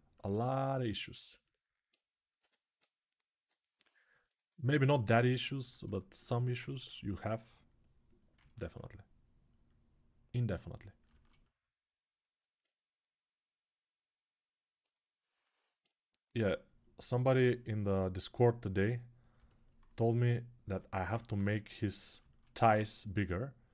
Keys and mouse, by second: 2.1 g, 2.5 ], 3.0 ], 6.2-8.5 ctrl+alt+right drag, 11.0 alt+right click, 11.9-19.2 ctrl+alt+drag, 19.2-23.7 alt+right drag.